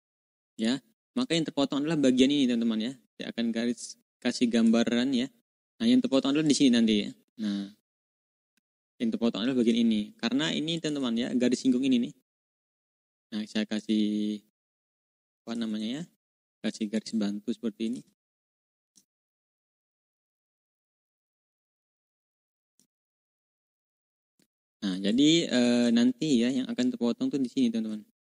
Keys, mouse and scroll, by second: 0.5 click, 1.2 ctrl+scroll up 2, 1.8 ctrl+scroll down 2, 4.5 click, 6.3 click, 8.4 click, 10.0 ctrl+z, 10.7 ctrl+click, 11.1 ctrl+scroll up 2, 12.5-12.8 ctrl+scroll up 2, 13.7 click, 14.4 ctrl+click, 16.8 shift+click, 17.9 ctrl+z, 19.1 shift+click, 20.5 click, 21.2-21.7 ctrl+scroll down 2, 22.2 click, 23.3-24.3 ctrl+shift+drag, 24.3-24.8 ctrl+scroll down 2, 25.4 ctrl+d, 26.7-28.3 drag.